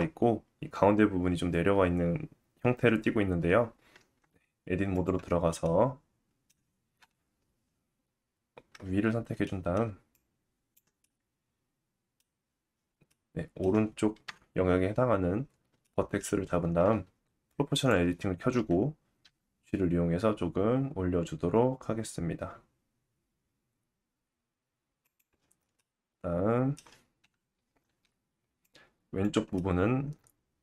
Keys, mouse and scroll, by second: 3.9 Tab, 5.6 middle click, 7.0 KP_7, 9.0 scroll up 1, 9.4 shift+middle click, 10.1 click, 11.0 middle click, 13.1 middle click, 14.3 KP_1, 15.4 scroll down 1, 15.8 shift+middle click, 16.4-17.7 middle drag, 17.7 click, 19.2 g, 25.8 middle click, 27.2 KP_7, 28.6 click, 29.5 middle click.